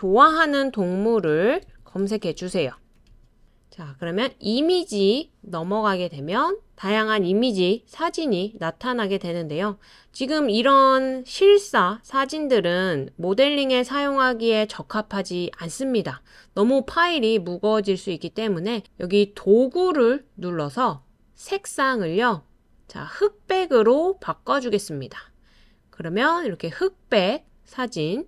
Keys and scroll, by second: 1.4-2.2 typing.